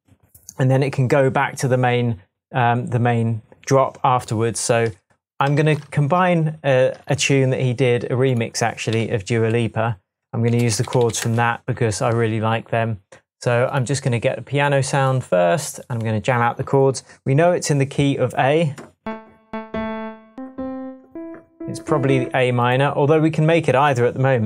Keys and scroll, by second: 5.5 super+s, 7.6 shift+super+t, 8.9 typing, 10.4-11.5 typing.